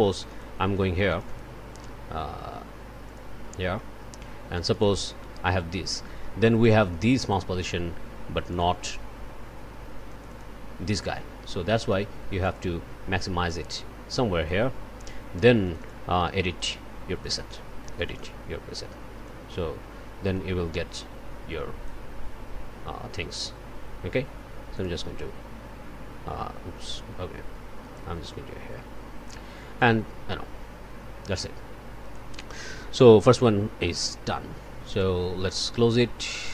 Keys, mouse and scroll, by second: 1.1 click, 3.0 click, 3.7 click, 4.5 click, 6.6 click, 8.5 click, 10.1 click, 12.4 click, 13.5-14.7 drag, 15.6 click, 16.6 click, 17.4 click, 18.0 click, 19.2-22.1 drag, 24.7 click, 26.9 click, 29.8-32.3 drag, 34.9 click, 36.3 click.